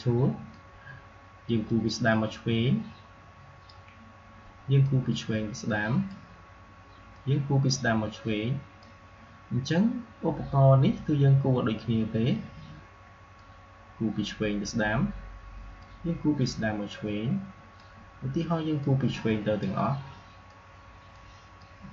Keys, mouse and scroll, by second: 13.2-21.9 drag.